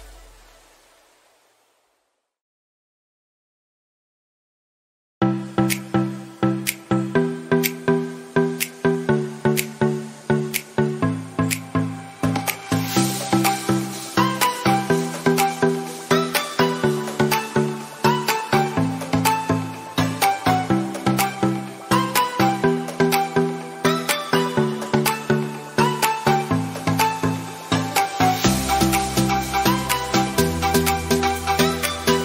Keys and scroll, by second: 17.4 ctrl+z, 17.5 ctrl+z, 17.8 ctrl+z, 18.4 ctrl+alt+z, 18.7 ctrl+alt+z, 19.3 ctrl+alt+z, 20.0 ctrl+z, 20.7 ctrl+alt+z, 21.5 ctrl+d, 21.7 ctrl+alt+z, 21.9 ctrl+d, 23.3 ctrl+d, 26.3 ctrl+alt+z, 27.2 ctrl+z, 27.5 ctrl+x, 27.7 ctrl+alt+z, 29.1 ctrl+alt+z.